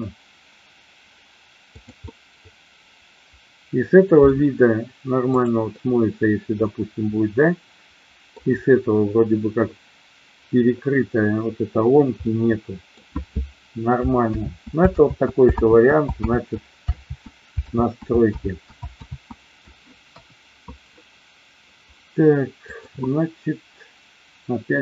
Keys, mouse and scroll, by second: 1.8 click, 2.0-4.3 middle drag, 5.6 scroll up 1, 5.8-8.3 middle drag, 12.3 scroll up 1, 12.4-13.1 middle drag, 14.4 ctrl+z, 15.0 ctrl+z, 16.3 ctrl+z, 17.8 ctrl+z, 18.4 ctrl+z, 19.0 ctrl+z, 20.0 KP_1, 22.6-24.8 drag.